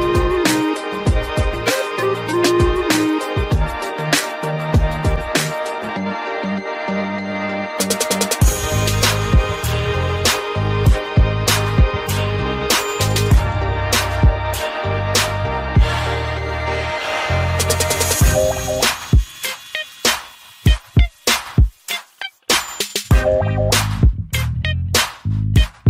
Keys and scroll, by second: 14.8 ctrl+0.